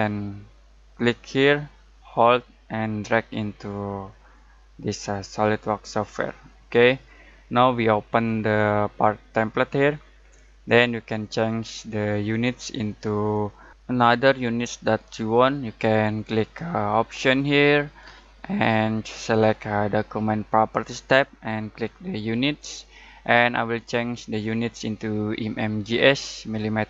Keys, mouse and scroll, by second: 0.8-5.5 drag, 2.4-5.5 drag, 17.1 click, 19.9 click.